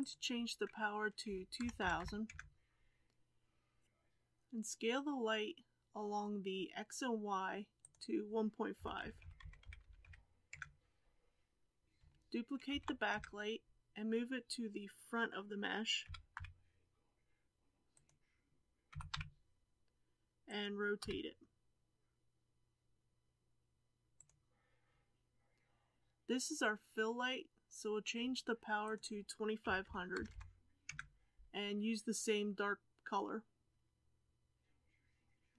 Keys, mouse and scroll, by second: 2.3 KP_0, 9.4-11.8 drag, 12.6 shift+d, 16.1 r, 18.9 g, 21.0 r, 30.8 KP_0.